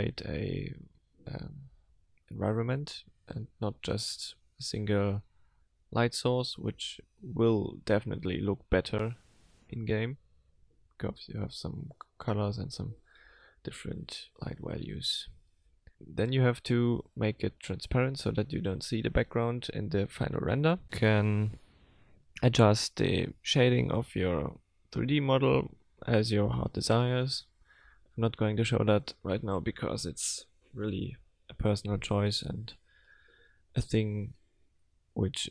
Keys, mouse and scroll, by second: 0.0 click, 11.6 middle click, 13.5 click, 15.6 middle click, 16.6 middle click, 17.6 middle click, 18.5 middle click, 19.1 middle click, 20.8 click, 22.3 click, 23.3 click, 24.0 middle click, 24.1 click, 27.2 middle click, 28.7 click.